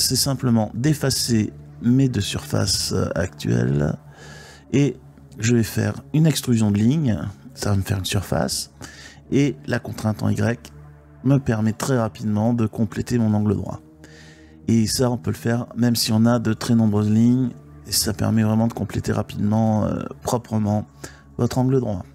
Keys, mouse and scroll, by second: 0.2 x, 2.7 2, 4.0-5.0 drag, 6.2 e, 7.7 y, 8.3 click, 8.9 e, 9.6 click, 10.6-12.5 middle drag, 13.5-14.9 middle drag, 16.2 g, 17.1 click, 19.1 shift+middle click.